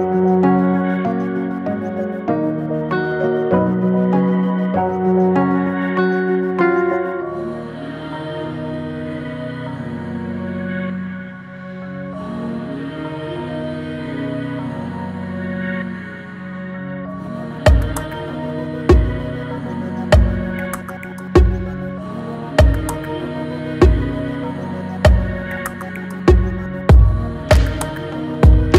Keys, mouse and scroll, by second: 2.8 Tab, 3.1 drag, 3.5-3.9 middle drag, 3.9 scroll down 3, 4.8 alt+z, 5.2 click, 5.7 scroll down 2, 6.0-6.4 middle drag, 6.4-6.9 scroll down 1, 6.9 Tab, 7.5 scroll up 1, 8.3 click, 8.6 middle click, 9.1-12.6 right drag, 12.6 ctrl+z, 13.7 e, 16.3-17.7 right drag, 17.7-20.2 drag, 20.2 ctrl+b, 23.3 alt+e, 26.7 scroll down 1, 26.8 middle click, 27.4 Tab, 27.6-28.1 middle drag, 28.1 click, 28.5-28.7 middle drag.